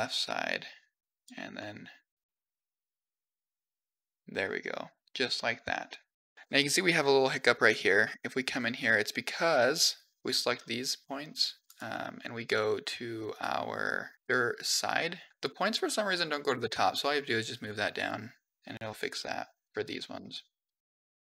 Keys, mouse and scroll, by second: 1.4-2.3 middle drag, 2.4 middle click, 2.6 click, 3.1 middle click, 3.9-5.0 drag, 5.2 middle click, 7.4 click, 7.9 Tab, 8.6 middle click, 9.6 click, 10.4-10.9 scroll down 3, 11.0 click, 11.7-12.1 scroll up 2, 13.2 click, 15.3 click, 16.5 g, 18.6 middle click, 19.7 click, 20.9 middle click, 21.0-21.3 typing, 21.1 middle click.